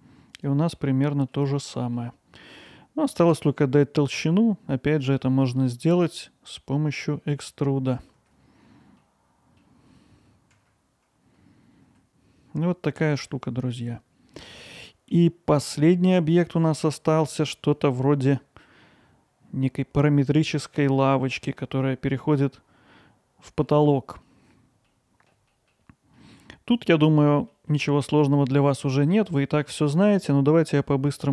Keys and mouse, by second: 0.8-1.4 alt+middle drag, 1.7 middle click, 3.1 alt+middle click, 4.7-5.2 middle drag, 6.6-7.1 middle drag, 8.9 middle click, 10.8 click, 11.0 alt+middle click, 11.9-13.3 middle drag, 13.9-14.6 alt+middle drag, 14.8 middle click, 15.7 middle drag, 16.5-16.9 middle drag, 17.4 click, 17.7-21.4 alt+middle drag, 24.9-25.3 alt+middle drag, 25.5 middle drag, 26.2-26.7 middle drag, 27.4 middle click, 27.7 middle drag, 28.2 alt+middle click, 28.8-29.1 middle drag, 29.6-30.7 middle drag.